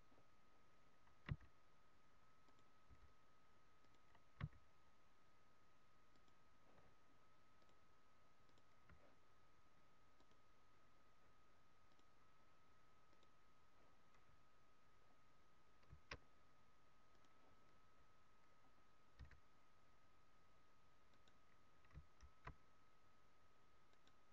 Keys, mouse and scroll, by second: 1.3 s, 2.4 click, 2.8 g, 4.0 click, 4.4 s, 6.3 click, 7.6 click, 10.2 click, 13.1 click, 14.9-15.3 scroll up 2, 17.0 click, 18.5 scroll up 1, 19.2 f, 21.2 right click, 22.2 shift+f, 24.0 right click.